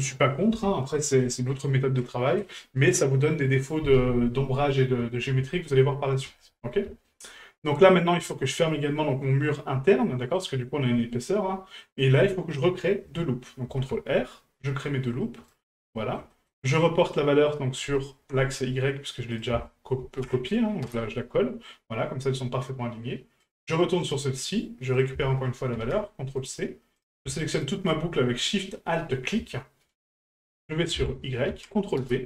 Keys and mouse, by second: 6.4-6.7 middle drag, 7.0 shift+middle click, 7.8-8.2 middle drag, 10.1-10.4 middle drag, 11.3-11.8 middle drag, 15.9 shift+middle drag, 16.3 middle drag, 17.5 right click, 17.9 alt+shift+right click, 18.0 alt+shift+right click, 19.3-20.9 drag, 23.4 right click, 24.0 right click, 25.1-26.5 ctrl+drag, 27.0 right click, 27.3 alt+shift+right click, 27.5 alt+shift+right click, 30.6-32.1 drag.